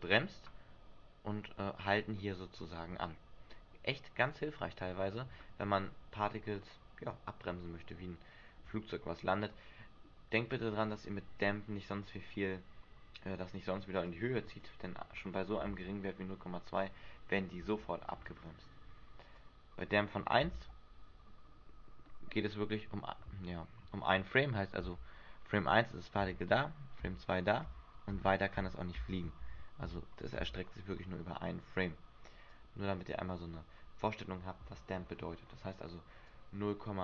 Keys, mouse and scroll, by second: 5.6 Escape, 10.8-12.6 scroll up 4, 12.6 scroll up 2, 14.2 click, 15.4-16.0 scroll down 3, 18.7 Escape, 19.5 click, 20.7 alt+a, 22.2 middle click, 22.5-23.0 scroll up 6, 23.1 Escape, 25.0 Right, 26.4 Right, 27.8 Right, 28.3 Right, 29.2 Right, 29.6 Right, 30.6 Right, 31.0 Escape, 32.6 click, 36.5 click.